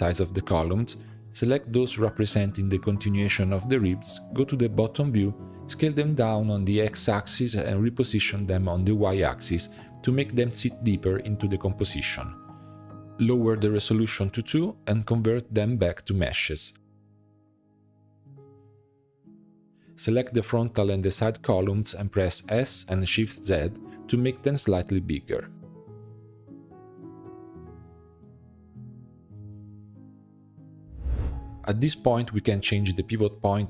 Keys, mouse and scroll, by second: 1.0 shift+middle click, 1.3 l, 1.7-3.1 middle drag, 3.1 l, 4.6 click, 5.8 shift+middle click, 6.3-6.9 scroll up 4, 7.3 s, 8.9 g, 11.8 s, 12.7 Tab, 13.8 click, 14.7-16.4 middle drag, 16.4-17.6 drag, 17.6 middle drag, 17.8 Tab, 18.0 a, 18.3 s, 19.6 g, 19.7 s, 19.8 g, 20.5 middle click, 21.0 click, 21.3-22.0 scroll up 2, 22.0 l, 22.6 l, 22.8-23.9 middle drag, 23.9 l, 24.2 middle click, 24.8 s, 27.7-28.7 middle drag, 28.7 Tab, 29.0-30.8 middle drag, 31.5 middle drag, 31.6 click, 31.7 Tab, 31.9 middle click, 32.0 a, 32.3 s, 33.5 g.